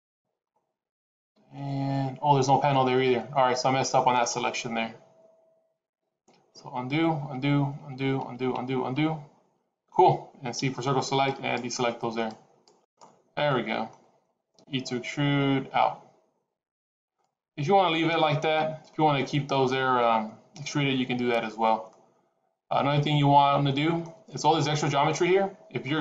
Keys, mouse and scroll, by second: 6.3 ctrl+z, 6.8 ctrl+z, 7.2 ctrl+z, 7.7 ctrl+z, 8.1 ctrl+z, 8.5 ctrl+z, 8.9 ctrl+z, 10.5 c, 13.4 middle click, 14.5 e, 21.8 middle click, 25.0 middle click.